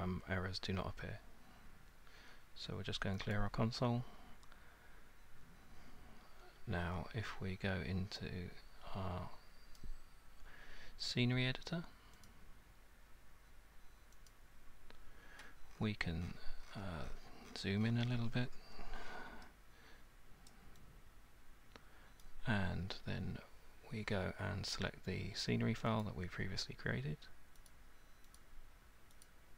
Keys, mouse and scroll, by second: 3.4-6.8 drag, 8.4 click, 9.8 click, 12.3 click, 14.3 click, 15.7-18.0 scroll, 20.5 alt+right click, 22.2 alt+click, 26.0 click, 27.7 click, 29.2 click.